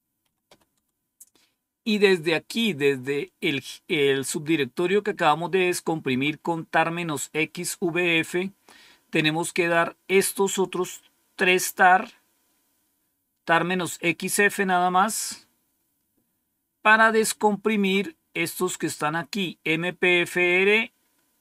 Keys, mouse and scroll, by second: 0.0-0.9 typing, 15.6-15.9 scroll up 1, 16.5-17.2 scroll up 1.